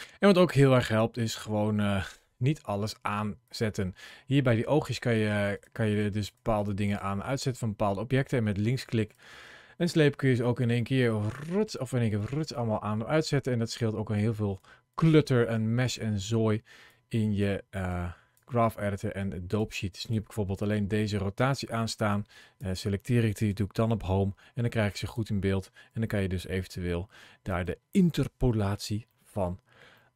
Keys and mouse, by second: 4.8 click, 5.8 click, 6.4 click, 7.1 click, 13.2 click, 14.0 click, 16.7 click, 19.9 click, 20.4 click, 21.9 click, 23.3 Home, 24.9 click, 25.7 g, 27.3 right click, 29.0 shift+middle click, 29.8 shift+click.